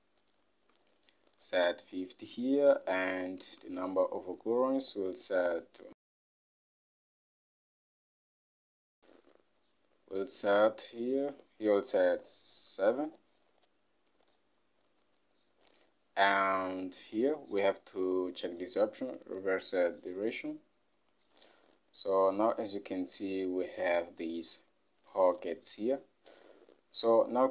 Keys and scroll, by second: 1.4 typing, 3.7 ctrl+Tab, 12.8 7.